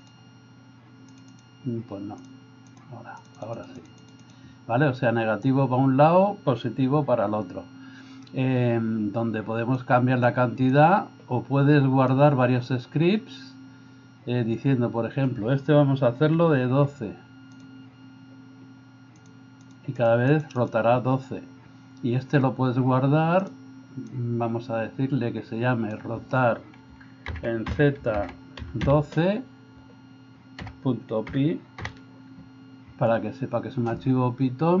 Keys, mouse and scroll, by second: 1.4 click, 2.7 click, 3.4 click, 9.8 click, 10.8 click, 16.3 1, 16.8 2, 17.6 click, 19.2 click, 20.0 click, 20.5 click, 23.5-34.8 drag.